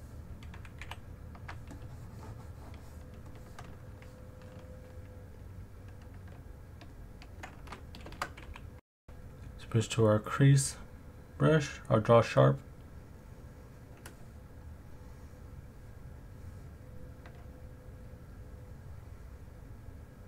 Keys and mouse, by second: 0.8 f, 3.3 shift+click, 8.1 shift+x, 8.5 f, 12.4 ctrl+click, 14.6 click, 16.2 click, 18.4 ctrl+click.